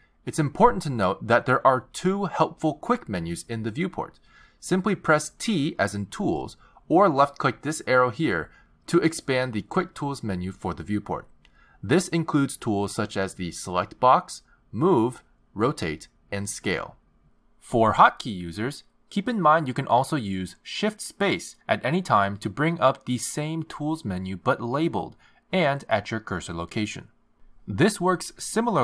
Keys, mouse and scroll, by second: 5.9 t, 8.2 t, 10.5 click, 21.3 shift+space, 24.6 shift+space.